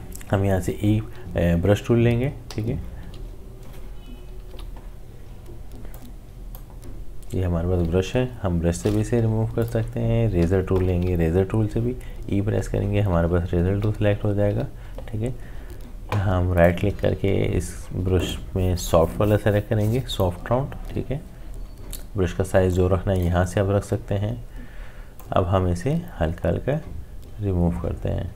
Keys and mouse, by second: 2.5 e, 4.5 b, 5.9-9.6 drag, 10.4 e, 12.7-14.5 typing, 16.5 typing, 16.5 right click, 18.2 click, 22.7-25.2 drag, 25.2-28.3 drag.